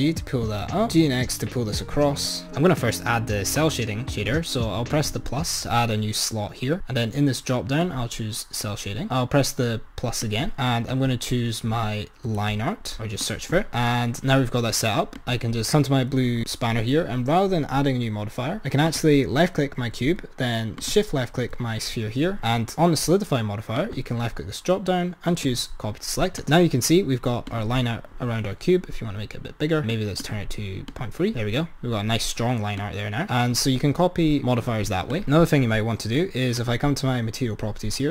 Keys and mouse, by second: 0.7 g, 2.5 click, 4.9-9.4 drag, 10.4-13.6 drag, 14.3 click, 15.2 click, 18.8-19.3 drag, 20.8-21.3 shift+drag, 23.8-26.3 drag, 27.7-28.1 drag, 29.9-31.3 drag, 32.7 click, 34.3-35.6 drag, 36.6 click.